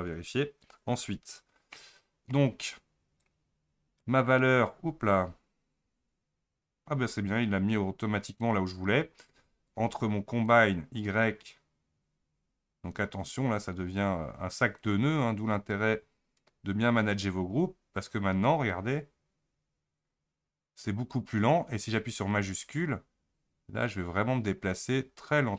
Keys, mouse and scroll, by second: 10.4-21.7 drag, 23.3-25.5 shift+drag.